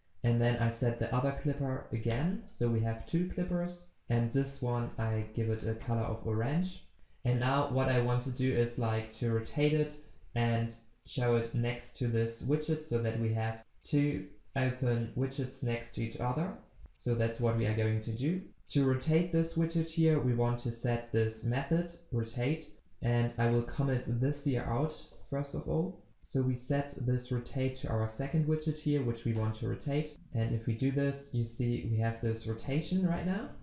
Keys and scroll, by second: 0.6 ctrl+v, 1.3 ctrl+s, 6.9 ctrl+s, 26.1 ctrl+z, 27.3 ctrl+v, 30.1 ctrl+s.